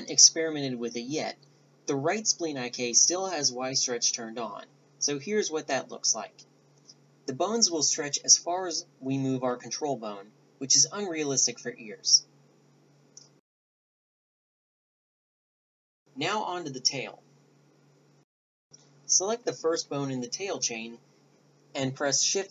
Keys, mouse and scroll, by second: 0.2-1.5 drag, 0.9 g, 2.1 middle drag, 2.6-3.2 middle drag, 2.6 g, 5.4-6.3 right drag, 5.8 g, 6.3-7.9 drag, 7.1 g, 8.4 click, 9.6 right click, 11.3 right click, 12.9-13.9 right drag, 14.7 alt+g, 15.2 a, 15.6 alt+g, 15.6 a, 16.1 a, 19.4 KP_1, 20.6-21.0 drag.